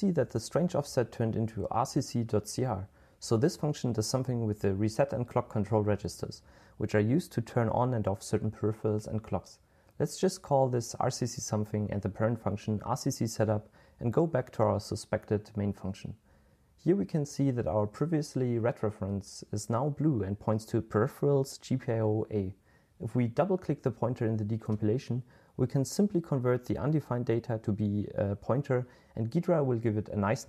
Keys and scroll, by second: 9.7-10.9 typing, 12.5-13.7 typing.